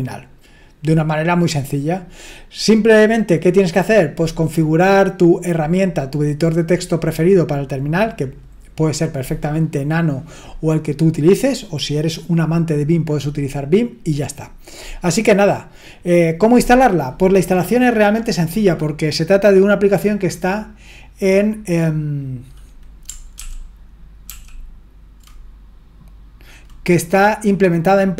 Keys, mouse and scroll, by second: 18.0 click, 23.3 ctrl+l, 24.3 ctrl+l.